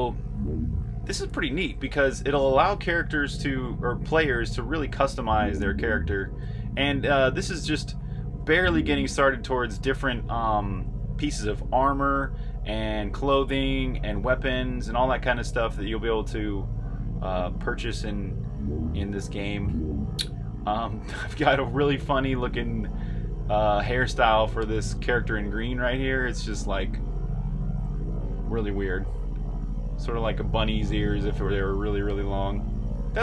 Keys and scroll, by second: 0.0-7.3 typing, 9.6 typing, 14.1 r, 15.0 r, 16.2 typing, 18.0-20.9 typing, 22.4 e, 24.1 r, 25.4 j, 25.8 j, 27.1-32.2 typing.